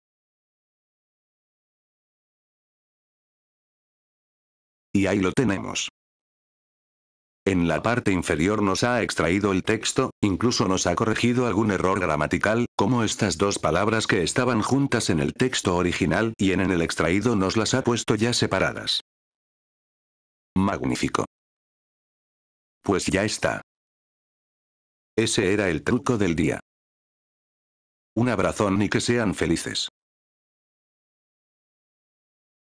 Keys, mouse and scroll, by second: 4.0 F4, 4.8 click, 7.9 click, 10.4 click, 14.4 click, 26.0-27.9 drag, 28.3 click.